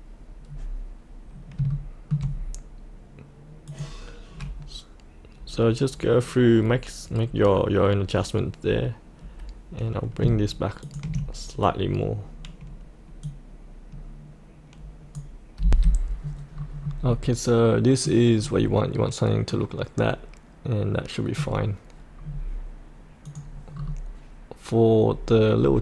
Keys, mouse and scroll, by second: 0.4-1.5 scroll up 1, 1.7 shift+middle click, 3.6 click, 6.7-7.2 scroll up 1, 7.2-10.2 scroll down 1, 10.8 ctrl+click, 13.2-15.4 drag, 15.6 F8, 16.1-16.5 scroll down 1, 16.5-17.0 scroll up 1, 17.0-18.3 middle drag, 18.4-19.3 scroll down 1, 19.4-21.3 middle drag, 22.2-23.2 scroll down 1, 23.2 click, 23.7-25.8 scroll up 1.